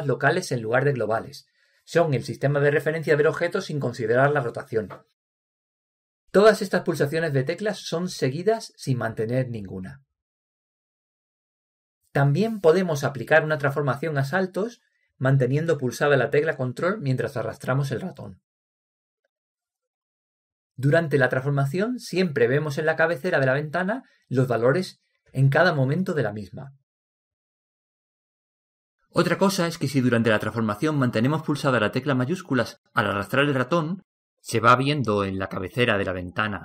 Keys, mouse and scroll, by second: 0.2 r, 2.2 g, 12.8 alt+r, 17.8 g, 24.8 g, 28.8 r.